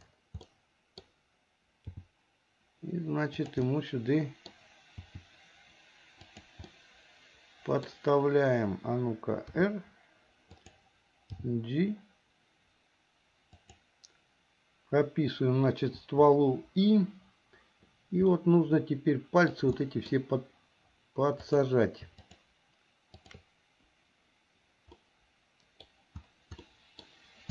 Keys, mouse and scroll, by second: 0.5 scroll up 1, 0.6 middle click, 2.0 g, 3.7 middle click, 6.8-8.0 middle drag, 6.8 scroll up 1, 7.9 scroll down 1, 9.6 r, 11.4 g, 18.4-19.5 middle drag, 19.8 middle click, 21.4 click, 22.2 shift+click, 23.2 shift+click, 25.0 middle click, 26.7 middle click.